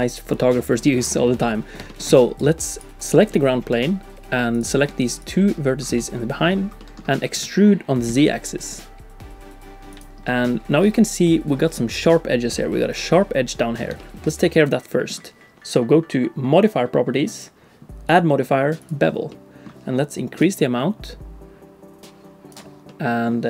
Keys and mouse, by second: 0.1 click, 1.3 click, 1.5 middle click, 1.9 shift+middle click, 2.1 click, 2.1 d, 2.7 click, 3.3 middle click, 3.8 Tab, 6.0 click, 6.8 click, 7.0 middle click, 7.4 e, 10.2 middle click, 10.9 Tab, 14.0 shift+click, 14.3 middle click, 17.3 click, 18.1 click, 19.3 middle click, 20.5-22.5 drag, 22.9 middle click.